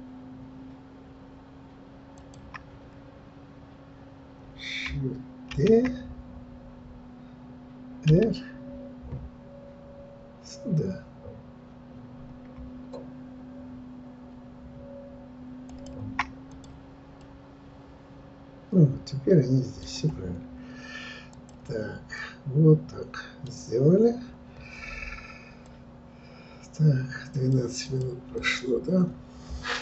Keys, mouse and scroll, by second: 5.5 shift+d, 16.6 click, 17.1-21.3 middle drag, 21.3 click, 22.2-23.6 middle drag, 23.6 scroll down 3, 24.1-24.4 scroll up 2.